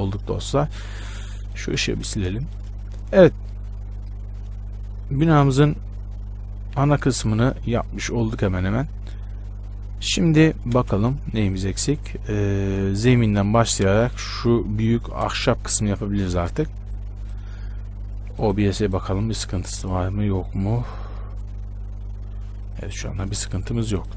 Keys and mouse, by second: 1.6-3.3 right drag, 2.1 x, 11.0 shift+space, 15.5 shift+space, 17.1-24.1 drag.